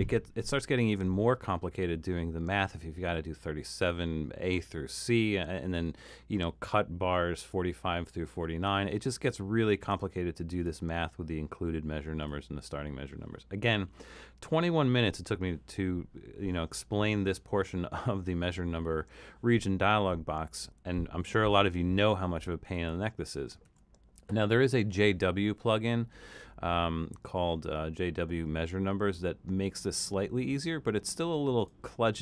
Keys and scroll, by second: 22.7 super+z, 23.6 super+z.